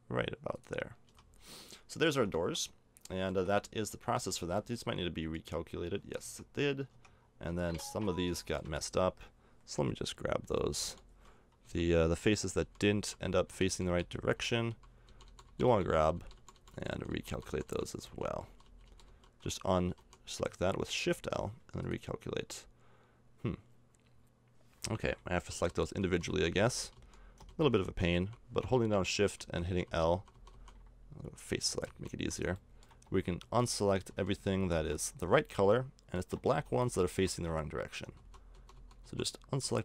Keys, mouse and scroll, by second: 0.9 middle click, 1.1 a, 2.1 Tab, 2.5 Tab, 3.3 middle click, 3.4 a, 4.0 Tab, 4.3 a, 6.0 a, 6.2 Tab, 6.9 Tab, 7.5 a, 7.9 a, 10.4-20.0 typing, 25.5-28.1 typing, 29.4-30.5 typing, 31.9 shift+l, 33.4 shift+l, 34.1 shift+l, 34.5 shift+l, 35.7-38.2 middle drag, 36.5 shift+l, 36.7 shift+l, 36.9 shift+l, 37.1 shift+l, 38.2-39.6 typing.